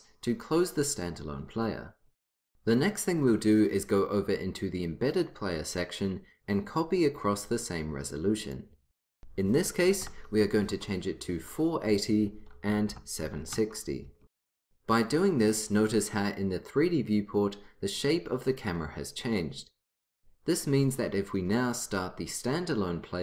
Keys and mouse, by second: 8.5-10.3 drag, 11.9-13.9 drag, 21.7-23.2 drag.